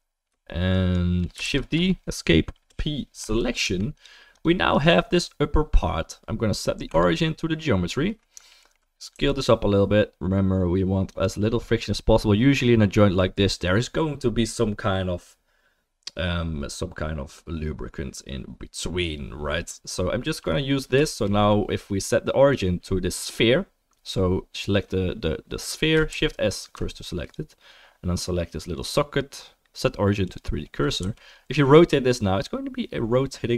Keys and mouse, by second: 1.4 shift+d, 2.7 p, 3.4 click, 3.4 middle click, 3.4-7.9 right drag, 3.6 Tab, 7.9-8.4 middle drag, 8.4 alt+right click, 8.6 alt+middle click, 8.7-21.1 alt+right drag, 9.1 s, 21.1-22.5 shift+middle drag, 22.5 click, 22.6-26.1 middle drag, 26.1 shift+s, 27.2 click, 29.1 right click, 29.5-29.9 right drag, 29.9-33.5 drag, 31.0 r.